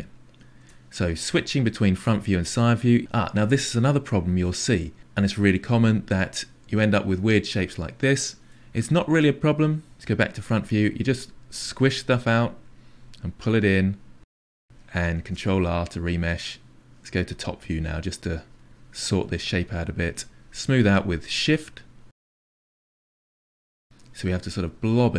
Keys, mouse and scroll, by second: 0.6 KP_1, 2.3-6.4 drag, 6.4-9.0 middle drag, 9.0 ctrl+z, 9.9 KP_1, 10.4 click, 10.9 click, 11.7 click, 12.0 click, 12.5-16.1 drag, 16.1 ctrl+r, 16.6 middle click, 17.5 click, 18.2 click, 18.6 middle click, 19.0 click, 19.3 click, 19.6 click, 20.0 middle click, 20.8 shift+click, 21.6-22.6 drag, 22.6 middle click, 23.2 click, 23.7 click, 24.4 middle click, 24.8 click, 25.0 click.